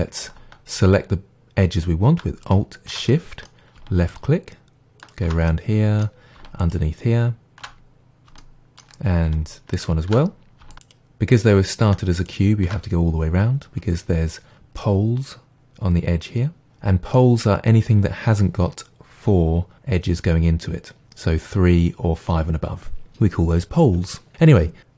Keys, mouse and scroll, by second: 0.7 alt+click, 0.8-2.5 middle drag, 2.5 alt+shift+click, 2.5-4.1 middle drag, 4.1 alt+shift+click, 4.2-5.0 middle drag, 5.0 alt+shift+click, 5.5-6.6 middle drag, 6.6 alt+shift+click, 6.7-9.8 middle drag, 9.8 alt+shift+click, 10.8 click, 12.3 alt+shift+click, 14.8-24.9 middle drag.